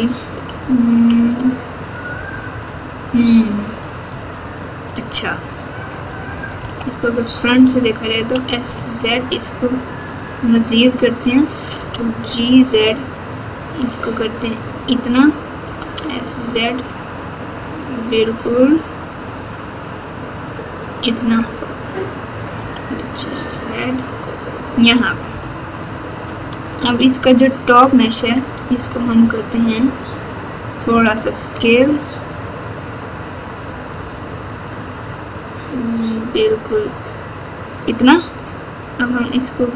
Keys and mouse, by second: 0.4 ctrl+KP_6, 0.9 ctrl+KP_6, 1.1 ctrl+KP_6, 2.5 KP_Subtract, 4.0 Tab, 4.9 Tab, 6.5 KP_1, 8.1 s, 11.7 g, 15.6 s, 22.5 g, 25.0 KP_4, 25.2 KP_4, 26.4 Tab, 27.7 click, 30.9 s.